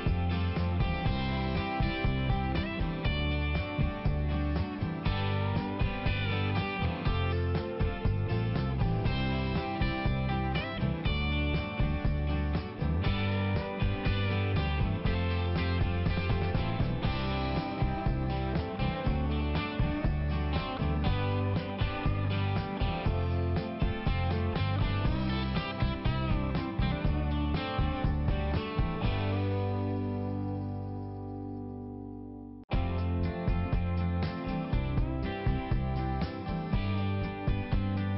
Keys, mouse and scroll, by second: 0.4 click, 1.2 click, 3.0 click, 6.1 click, 8.7 click, 10.2 click, 11.5 [, 12.1 click, 13.4 click, 14.1 click, 14.8 click, 15.8 click, 16.3 click, 16.8 click, 17.7 click, 18.4 click, 18.7 click, 18.9 double click, 19.1 double click, 19.2 double click, 19.8 click, 20.3 click, 20.6 click, 21.2 click, 21.4 click, 21.6 click, 22.1 click, 22.3 click, 22.5 click, 22.5 double click, 22.9 double click, 23.1 double click, 23.4 double click, 25.1 click, 25.9 click, 26.5 click, 27.1 click, 27.2 click, 27.5 click, 27.6 double click, 27.8 double click, 28.2 double click, 28.4 double click, 28.7 double click, 29.0 double click, 29.1 double click, 29.5 double click, 29.9 double click, 30.4 click, 31.0 click, 36.2 click.